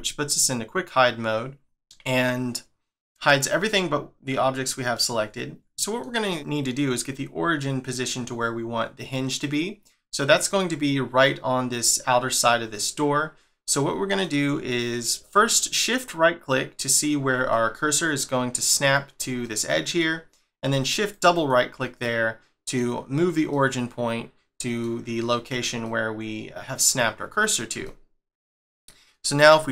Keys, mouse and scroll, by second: 0.0 middle click, 4.3-4.9 scroll up 1, 4.9 middle click, 8.3-9.4 scroll up 1, 9.4 middle click, 12.7 middle click, 15.6 shift+right click, 17.5 middle click, 19.4 middle click, 21.1 shift+right click, 22.0 middle click, 23.5 middle click, 25.8 middle click, 27.1 scroll down 1, 27.8 shift+middle click.